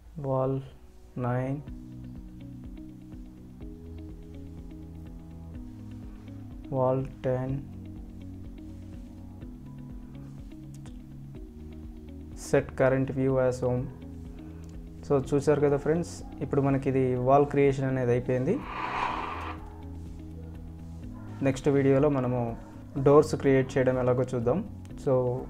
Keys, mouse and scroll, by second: 0.0 shift+click, 2.6-3.0 scroll up 1, 4.4 click, 8.3 scroll down 1, 8.9 scroll up 1, 9.0 click, 9.0 right click, 13.4 click.